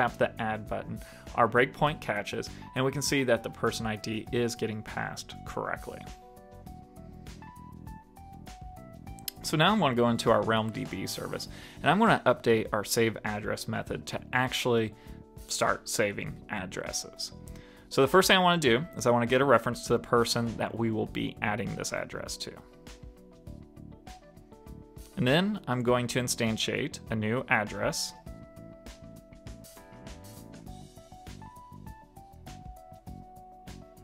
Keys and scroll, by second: 11.2 shift+super+Left, 22.6 super+s.